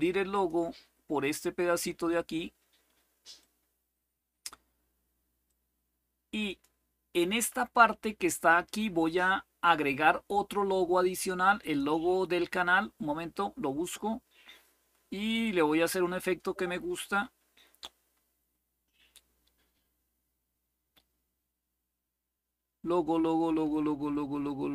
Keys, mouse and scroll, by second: 0.0 click, 3.1-4.2 drag, 5.2-6.4 drag, 7.0 click, 11.3 click, 13.1-14.2 scroll down 2, 14.6-18.2 scroll down 8, 18.2-18.8 scroll up 2, 22.0-22.7 scroll up 2.